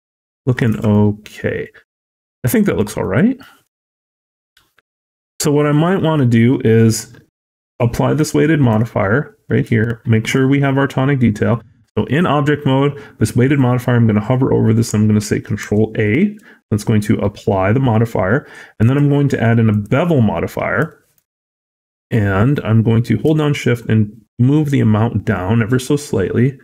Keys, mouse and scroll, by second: 0.2 middle click, 0.6 a, 0.7 scroll down 1, 0.8 middle click, 1.1-1.5 scroll up 3, 1.5 middle click, 3.3-3.6 scroll down 3, 3.6 shift+middle click, 3.8 shift+middle click, 3.9 middle click, 4.2-4.7 scroll up 3, 4.9 shift+middle click, 5.4 scroll up 1, 5.8 scroll down 1, 8.0 click, 8.6 click, 18.7 click, 20.4 scroll up 1, 20.7 shift+middle click, 23.5 shift+click.